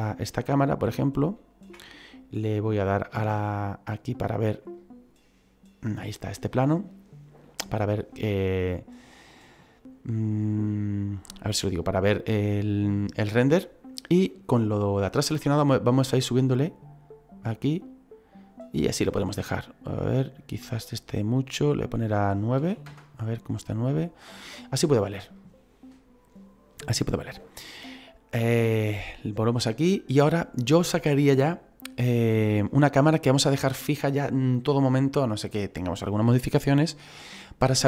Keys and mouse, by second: 0.5 middle click, 4.1 click, 15.8 click, 20.5 click, 21.7 click, 22.6 KP_9, 28.8 click.